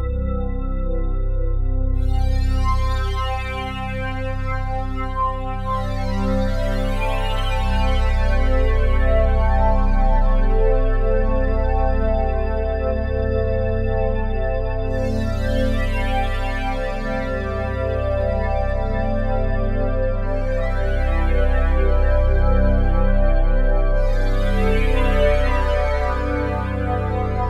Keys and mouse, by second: 2.3 click, 5.1-9.7 drag, 11.2 click, 12.1 alt+click, 13.2-16.0 drag, 16.5-22.3 drag, 23.3-27.0 drag, 27.0 KP_0, 27.2 Return.